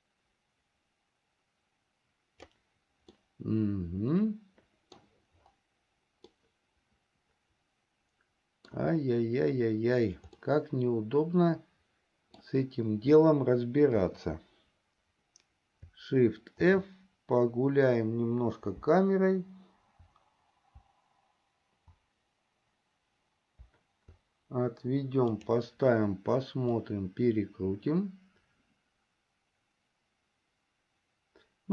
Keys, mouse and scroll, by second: 3.6-5.4 middle drag, 7.0-9.6 middle drag, 11.0-13.0 middle drag, 14.6 KP_0, 17.3 shift+f, 27.1-31.7 drag.